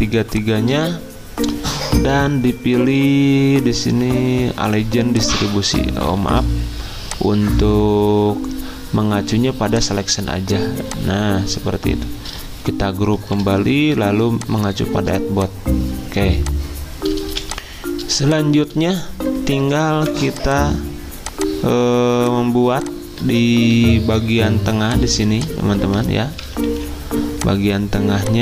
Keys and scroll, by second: 6.2 ctrl+z, 14.3 ctrl+g, 17.3 z, 19.9 v, 25.2 v, 25.8 ctrl+z, 26.7 Escape.